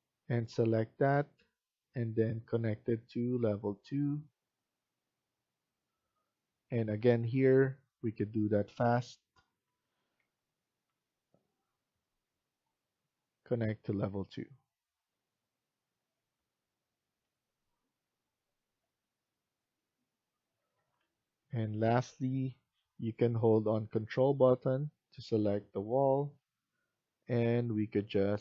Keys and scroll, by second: 6.8 Tab, 16.0 Escape, 18.5 Tab, 20.8 Escape.